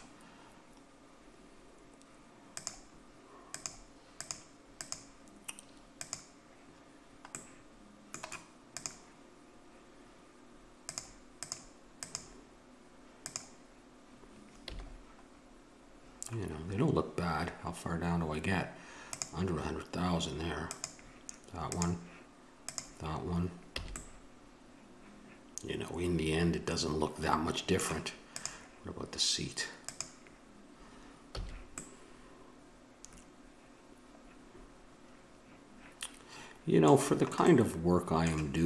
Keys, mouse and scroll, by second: 2.5-7.3 drag, 7.3 right click, 8.7-10.1 right drag, 10.1 click, 10.8-14.8 drag, 14.6 a, 15.0-19.0 middle drag, 19.0-24.5 drag, 23.7 a, 24.5-25.7 middle drag, 28.3-31.7 drag, 31.3 a, 32.1-33.5 middle drag, 37.1-38.6 middle drag.